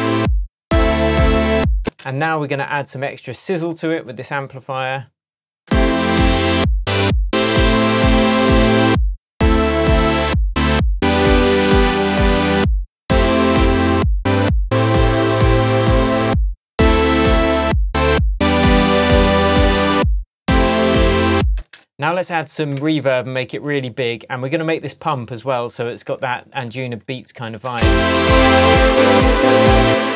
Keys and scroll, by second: 1.8 space, 5.6 space, 21.5 space, 22.7 Tab, 26.0 Tab, 27.7 space, 29.8 space.